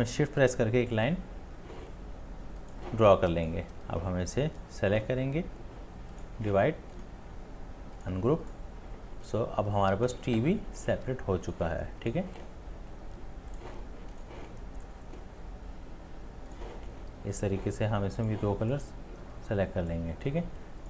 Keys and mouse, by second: 0.2 shift+click, 7.0 right click, 19.2 right click, 19.5 space, 19.7 click, 19.7 click, 19.8 click, 19.9 space, 20.0 space.